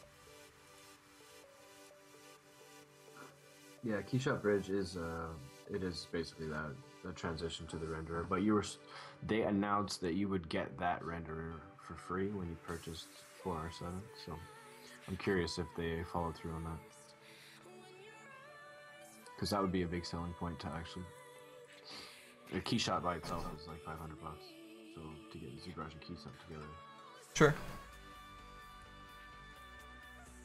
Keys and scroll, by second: 21.0 ctrl+z.